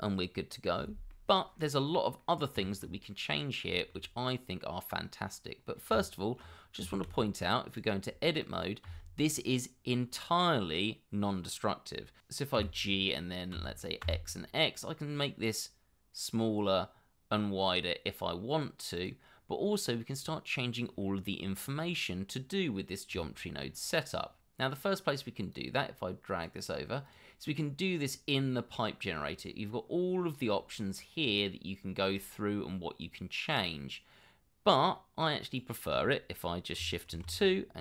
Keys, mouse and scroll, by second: 1.8 scroll up 1, 2.2 middle click, 2.6 shift+middle click, 3.1 middle click, 3.8 shift+middle click, 4.5 scroll down 1, 5.6 scroll up 1, 5.9 Tab, 6.9 shift+z, 8.4 shift+click, 8.8 shift+z, 12.2 Escape, 12.5 g, 13.5 x, 23.1 Tab, 28.3 scroll down 1, 30.5 scroll up 1, 30.8 scroll down 1, 32.0 scroll up 1, 37.1 shift+2.